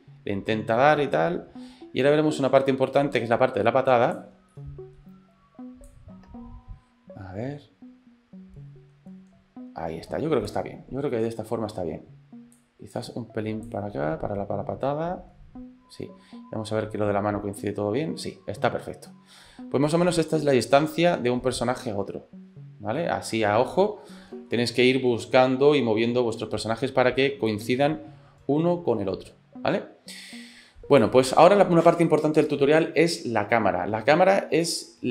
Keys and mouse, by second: 4.5 middle click, 5.9-10.7 drag, 12.6 click, 13.7-20.5 drag, 20.7-24.5 middle drag, 27.6-31.2 drag.